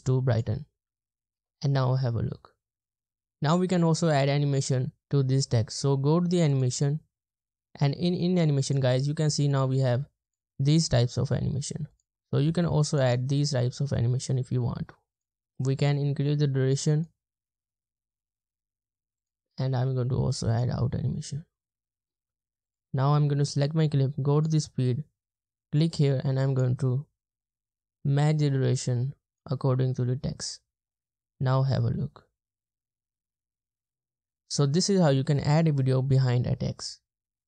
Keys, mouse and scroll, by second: 1.9 space, 3.1 space, 30.9 space.